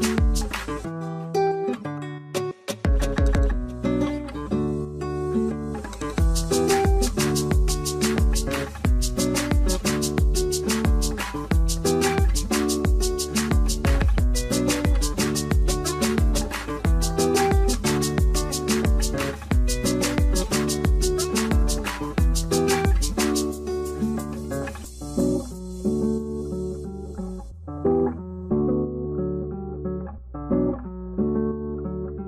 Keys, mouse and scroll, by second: 6.4 m, 9.3 3, 9.5 Return, 10.1 Return, 11.9 4, 12.0 Return, 13.1 5, 13.4 Return, 18.4 double click, 22.8 double click.